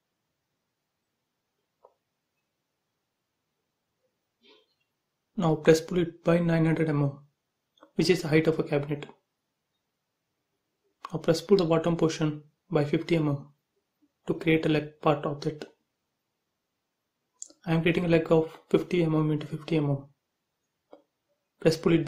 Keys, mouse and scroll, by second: 0.8 r, 1.7 click, 2.9 space, 3.1-4.0 scroll up 1, 4.1-6.2 typing, 4.3 click, 6.4 click, 6.7 right click, 7.6 click, 8.0 middle click, 8.8 click, 9.6-11.5 typing, 9.6 click, 9.7 click, 11.2 Return, 11.7 click, 12.5 e, 12.8 space, 13.5 shift+e, 13.7 space, 13.9 scroll up 1, 14.2 middle click, 14.3 middle click, 14.8 scroll down 1, 15.7 r, 16.3 click, 17.2-20.6 typing, 19.8 scroll up 1, 20.8 click, 21.8-22.0 typing.